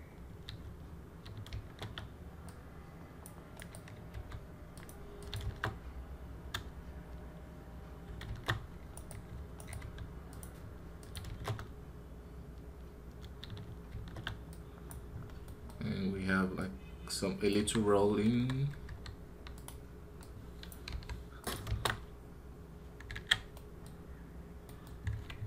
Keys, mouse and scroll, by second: 3.4 right click, 8.7 right click, 9.4 right click, 9.6 g.